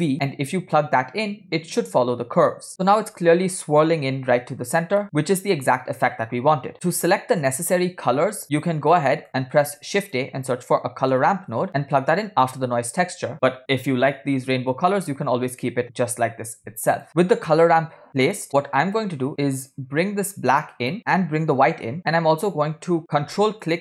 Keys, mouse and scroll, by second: 0.1-0.7 drag, 2.7 middle click, 4.7 scroll up 2, 5.2 middle click, 5.7-6.2 scroll up 2, 6.9 scroll down 7, 8.4-8.8 drag, 9.0 click, 9.3 scroll up 2, 9.7 shift+a, 17.1 click, 17.6-17.9 scroll up 5, 18.1 scroll down 2, 18.5-22.1 drag.